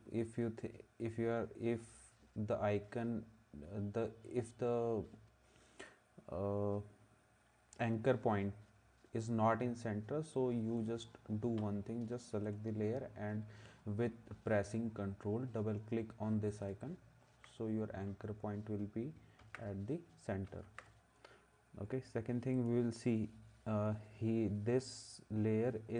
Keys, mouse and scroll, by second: 16.6 ctrl+s, 19.4 ctrl+s, 20.7 ctrl+s.